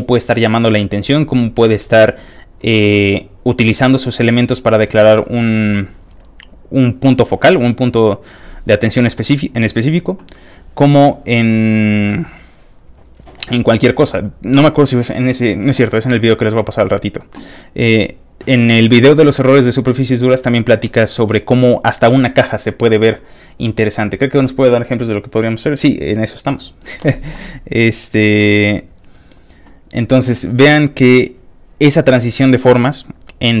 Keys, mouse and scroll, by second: 0.8 click, 4.5-5.1 scroll down 2, 5.1 scroll up 2, 10.3-13.4 scroll down 5, 17.0-17.5 scroll down 2, 19.3 scroll down 1, 20.8 middle click, 27.6-28.3 scroll down 4, 28.7-29.0 scroll down 3, 29.3 scroll down 3, 29.9 scroll down 2, 30.5-31.3 scroll down 2, 31.3 scroll up 2.